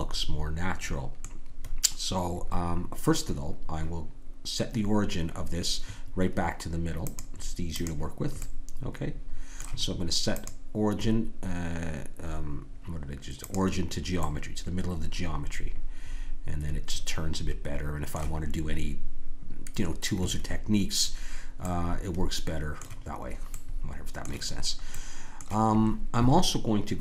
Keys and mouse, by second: 7.0-8.8 drag, 8.8-10.3 middle drag, 10.3-16.3 drag, 21.6-25.0 middle drag.